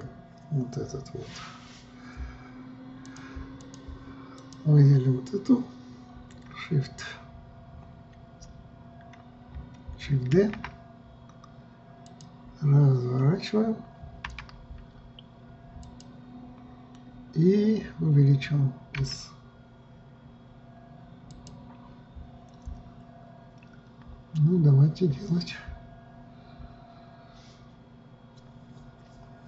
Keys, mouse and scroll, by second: 0.3 KP_3, 3.6-5.1 drag, 11.0 shift+d, 14.9 r.